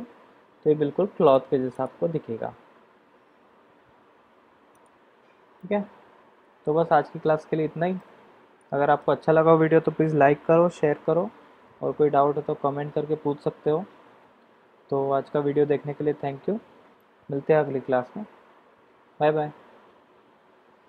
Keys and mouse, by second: 1.7 click, 4.7 click, 5.5-7.0 middle drag, 7.9-9.0 shift+middle drag.